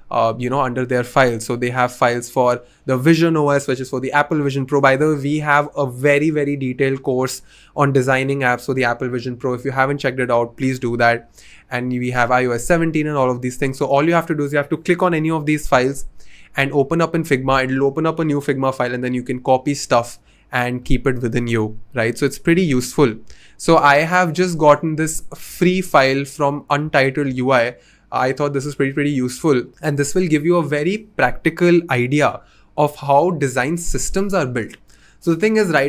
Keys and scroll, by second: 9.7 Return, 9.7 typing, 13.4 typing.